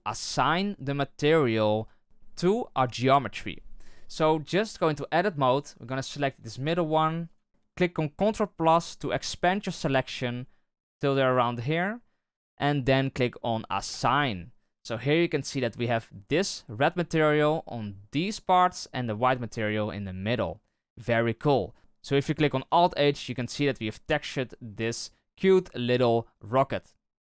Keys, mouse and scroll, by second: 2.0-4.1 scroll down 1, 4.1-5.6 scroll up 1, 5.6-6.6 scroll up 1, 6.6-7.2 scroll up 1, 7.2-9.6 scroll up 1, 9.6-12.3 scroll up 1, 12.3-14.0 scroll up 1, 14.0 click, 14.7 Tab, 15.1-20.2 scroll down 1, 20.2-21.8 scroll down 1, 21.8-22.5 scroll down 1, 22.5-23.4 scroll down 1, 23.4 right click, 23.8-26.0 middle drag, 26.0-27.2 scroll down 3.